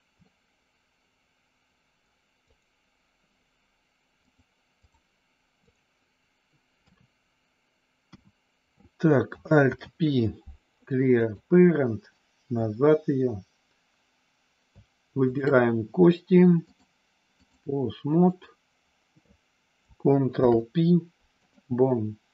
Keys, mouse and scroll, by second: 0.2-2.0 middle drag, 2.4 click, 4.2 click, 6.8 KP_3, 8.2 KP_1, 9.5 alt+p, 16.8 click, 18.3 click, 20.3 ctrl+p.